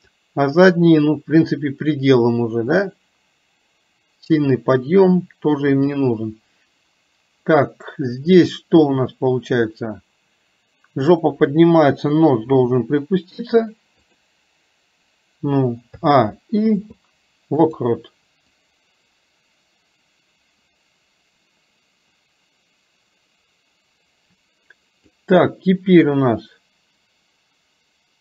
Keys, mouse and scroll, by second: 0.1 click, 2.2-3.5 drag, 3.6-6.0 drag, 11.1 click, 18.7-25.2 drag.